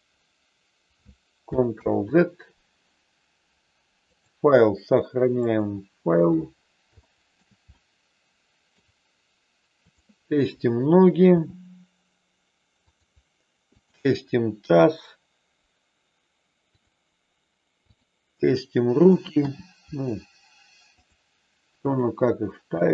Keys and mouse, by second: 1.9 ctrl+z, 4.3-5.6 drag, 6.9 shift+middle click, 7.6-8.8 middle drag, 9.8 click, 11.3 g, 12.9 click, 13.6 click, 14.6 g, 17.9 click, 19.4 g, 21.0 click, 21.8 click, 22.6 g.